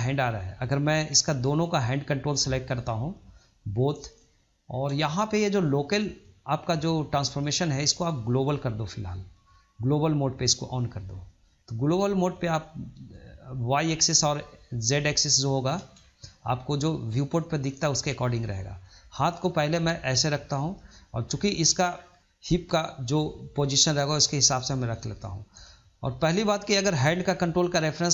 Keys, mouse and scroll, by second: 1.1-2.3 scroll up 1, 2.3 click, 3.7 shift+click, 4.2-4.6 middle drag, 4.6-4.9 scroll down 1, 4.9-7.1 shift+middle drag, 7.1-10.2 drag, 11.5-13.0 middle drag, 13.0 click, 15.4-15.7 middle drag, 15.7 scroll down 1, 16.0-17.9 shift+middle drag, 17.9 click, 20.6 scroll down 2, 20.9 middle click, 21.8 scroll up 1, 22.1 shift+middle click, 22.4 click, 23.3 click, 24.8-28.1 middle drag.